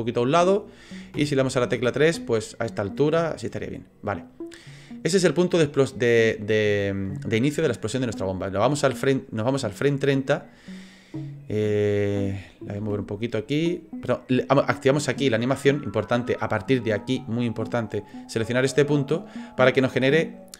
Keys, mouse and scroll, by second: 1.1 KP_3, 2.3-3.4 scroll down 3, 3.4 middle click, 9.5 click, 12.8 g, 19.3 click.